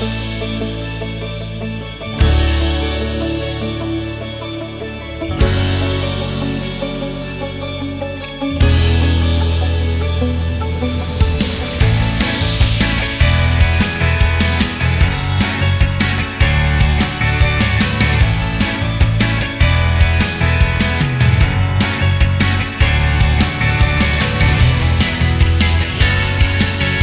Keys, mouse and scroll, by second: 0.9 ctrl+click, 1.2 ctrl+double click, 1.6 click, 1.9 click, 2.2 click, 2.4 click, 2.7 click, 3.0 click, 3.2 click, 3.4 click, 3.6 click, 3.8 click, 4.1 click, 4.3 click, 4.6 click, 4.8 click, 5.0 click, 5.2 click, 5.5 click, 5.7 click, 6.1 click, 6.3 click, 6.5 click, 6.7 click, 6.9 click, 7.1 click, 7.3 click, 7.5 click, 7.7 click, 7.9 click, 8.1 click, 8.3 click, 8.7 click, 9.1 click, 9.4 click, 9.7 click, 10.3-12.1 ctrl+right drag, 12.2-13.3 ctrl+drag, 13.5 ctrl+click, 13.8 double click, 14.1 click, 14.5 click, 14.8 click, 15.1 click, 15.4-18.4 drag, 18.6 click, 18.8-23.4 drag, 24.0 alt+click, 25.1 alt+click, 25.4 alt+click, 26.2 alt+shift+middle click.